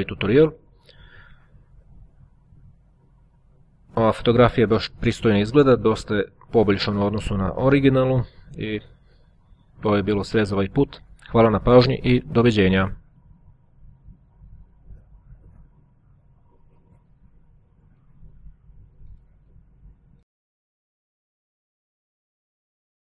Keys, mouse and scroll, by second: 0.6-1.9 scroll up 1, 7.7-8.3 scroll up 1, 12.8 click, 13.9 click.